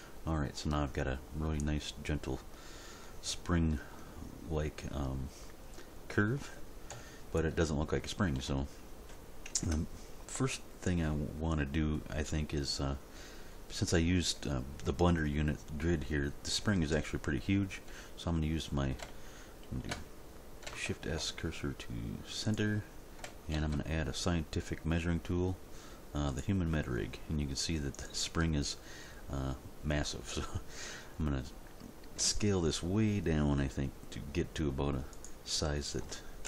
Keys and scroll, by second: 6.9 End, 9.6 Tab, 16.9 End, 21.1 shift+s, 23.5 shift+a, 32.2 s.